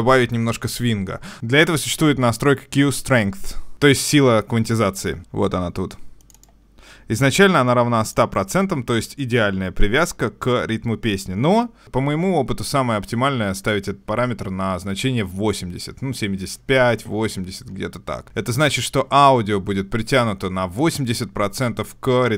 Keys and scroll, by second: 1.3 super+Tab.